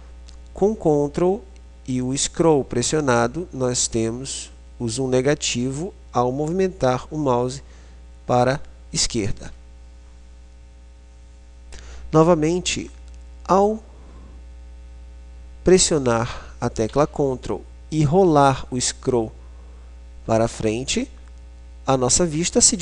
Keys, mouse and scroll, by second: 21.2 middle click.